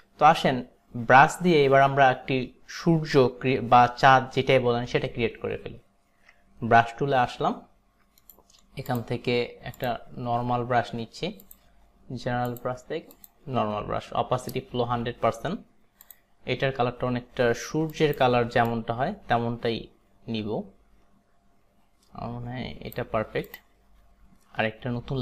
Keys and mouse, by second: 6.8 b, 8.2 right click, 9.0 click, 9.9 click, 11.5 click, 13.2 click, 16.1 click, 18.0 click, 18.7 click, 23.6 click.